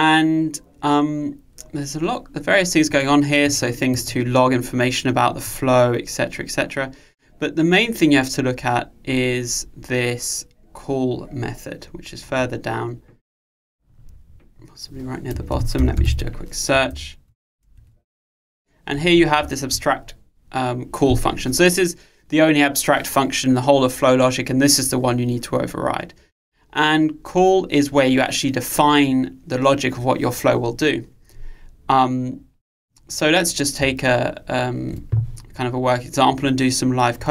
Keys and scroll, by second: 15.7 super+f.